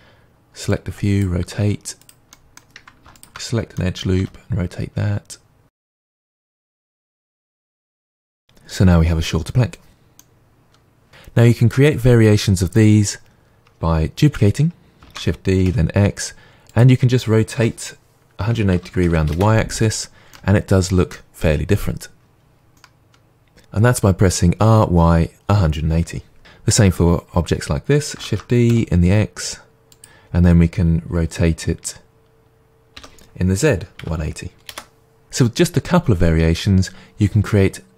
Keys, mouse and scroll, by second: 0.7 click, 1.6 r, 2.1 click, 2.3 middle click, 3.1 alt+click, 3.7 middle click, 4.2 r, 5.7 click, 5.8 middle click, 6.5 scroll up 1, 6.6 shift+middle click, 6.7 click, 6.9 g, 7.1 click, 7.3 g, 7.7 click, 7.9 Tab, 8.1-16.8 middle drag, 8.1 scroll down 2, 15.1 shift+d, 16.8 click, 17.5 r, 19.4 Return, 20.3-26.4 middle drag, 26.4 click, 28.2 shift+d, 30.0 click, 32.9 r, 34.7 Return, 35.2-37.9 middle drag.